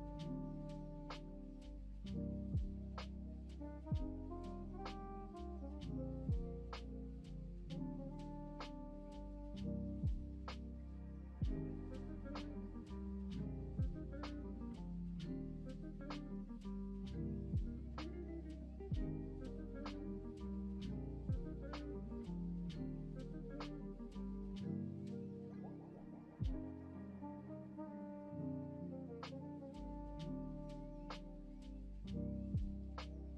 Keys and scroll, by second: 7.0 ctrl+v, 10.7 ctrl+Home, 14.7 s, 17.8 s, 20.5 v, 27.8 ctrl+c.